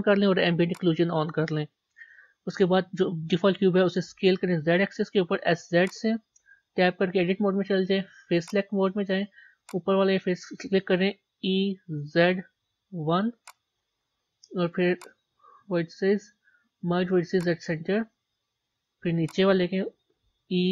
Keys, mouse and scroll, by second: 0.7 click, 4.1 s, 6.7 Tab, 8.4 click, 8.9 middle click, 9.7 click, 11.3 e, 17.4 click, 18.1-19.3 middle drag, 19.3 click, 20.3 e.